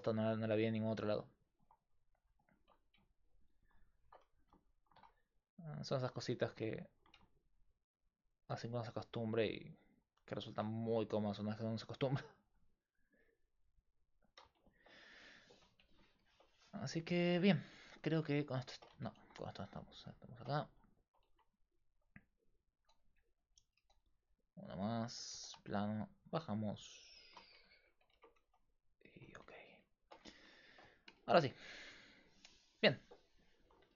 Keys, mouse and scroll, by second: 1.6 middle click, 4.4 g, 6.4 g, 10.3 middle click, 10.9 r, 14.6-15.9 middle drag, 17.5 alt+right click, 18.0 a, 19.1 shift+a, 21.3 Tab, 21.9 s, 22.8 s, 23.8 s, 25.1 g, 27.4 Tab, 28.1 Tab, 28.5 s, 29.3 Tab, 31.4 KP_5.